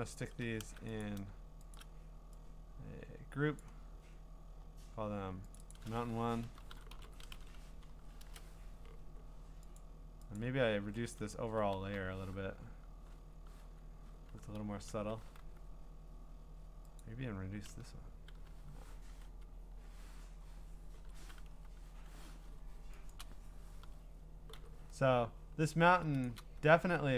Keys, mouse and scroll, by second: 1.0 click, 1.0-1.7 scroll, 1.7 shift+click, 3.6 click, 4.5-5.6 scroll, 5.6 click, 5.7 click, 6.2-8.3 typing, 9.8 click, 10.4 click, 11.1 click, 11.5 typing, 13.4-15.9 typing, 17.0 click, 17.5-21.5 typing, 17.7-20.1 drag, 23.2-26.1 drag, 23.8-24.5 typing, 26.8 scroll.